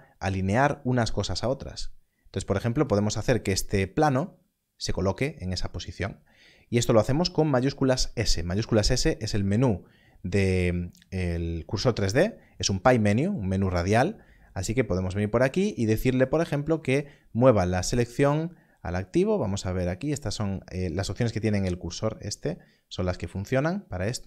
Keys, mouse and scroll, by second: 2.9 click, 7.4 click, 7.8 shift+s.